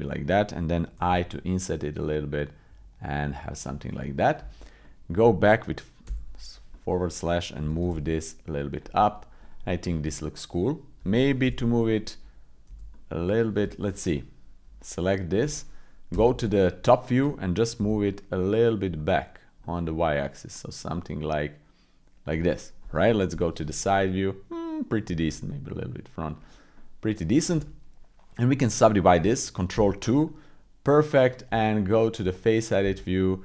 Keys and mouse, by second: 0.9 i, 4.4 Tab, 4.8 click, 6.0 /, 6.7 click, 7.7 g, 9.0 click, 9.6-10.9 drag, 11.4 KP_7, 12.7 g, 12.9 click, 13.7 Escape, 14.1 click, 16.1 KP_7, 17.8 g, 22.5 click, 23.3 KP_3, 25.2 g, 26.7 click, 29.8 ctrl+2, 30.2 middle click, 31.4 Tab, 32.5 middle click.